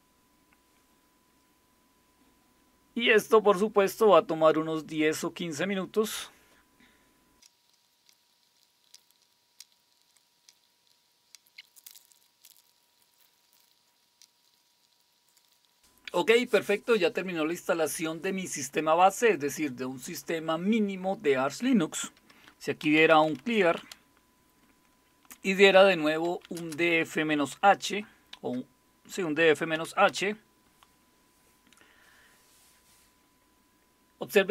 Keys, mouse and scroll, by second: 22.6-23.8 typing, 26.0-28.5 typing, 29.7-30.1 typing.